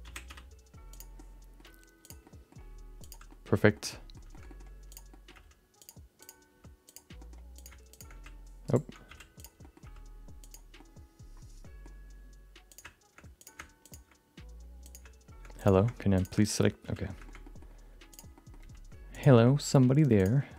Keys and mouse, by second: 0.2 r, 1.1 middle click, 2.0 click, 2.2 middle click, 2.6 g, 3.4 middle click, 3.7 middle click, 4.0 middle click, 4.5 middle click, 4.9 click, 5.2 middle click, 5.3 g, 6.2 click, 6.4 g, 7.5 click, 7.9 shift+click, 8.1 g, 9.1 f, 9.4 click, 9.6 middle click, 9.8 g, 10.9 middle click, 12.7 click, 13.4 click, 13.8 shift+click, 14.8 click, 15.6 click, 16.1 shift+click, 16.8 f, 17.4 middle click, 18.1 click, 18.3 middle click, 18.6 g, 19.6 middle click, 20.2 click, 20.4 middle click.